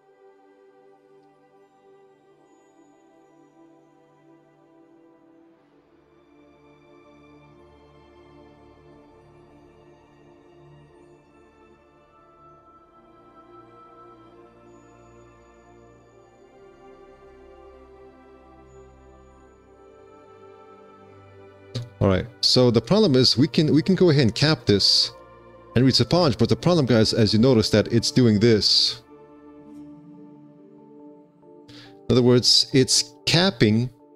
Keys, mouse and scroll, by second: 23.2 3, 23.4 q, 25.4 3, 28.1 alt+x, 32.3 q.